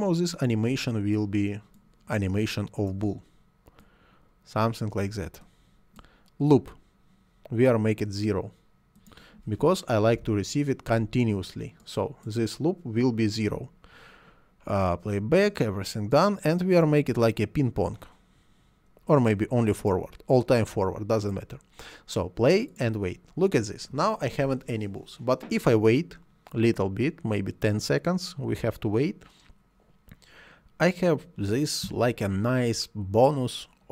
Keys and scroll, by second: 10.1 0, 10.2 Return.